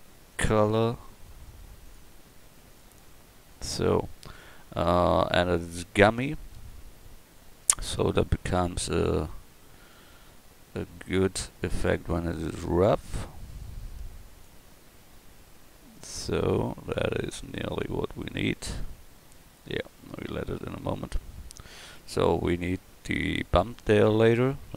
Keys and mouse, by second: 23.5 a.